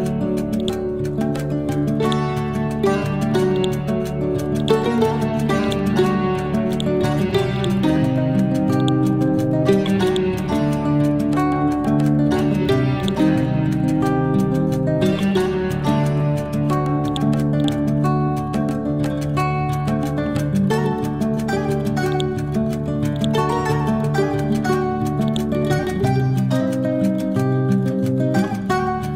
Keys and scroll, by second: 10.7 e, 11.9 ctrl+g, 13.5 e, 14.3 Up, 15.0 Down, 16.8 ctrl+g, 17.7 c, 22.9 ctrl+g, 27.8 Down.